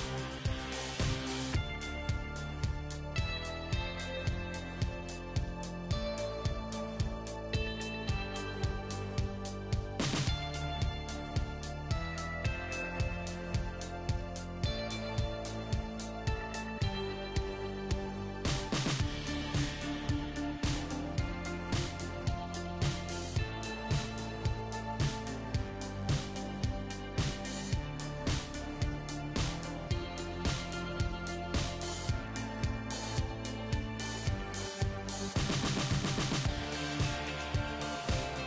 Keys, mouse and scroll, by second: 3.3-5.2 middle drag, 4.3 g, 5.4 r, 6.6 g, 8.3 s, 10.5 ctrl+z, 11.1 ctrl+z, 12.2 s, 14.0 g, 15.7 r, 17.5 z, 17.7-20.0 middle drag, 18.7 g, 21.7-23.7 middle drag, 23.0 g, 25.5-27.7 middle drag, 25.5 g, 26.8 g, 29.2 middle click, 29.2 g, 30.6 Tab, 31.0-34.3 right drag, 31.3 Tab, 31.7 Tab, 33.4 g, 35.2-36.6 middle drag, 36.5 g, 38.1-38.4 right drag.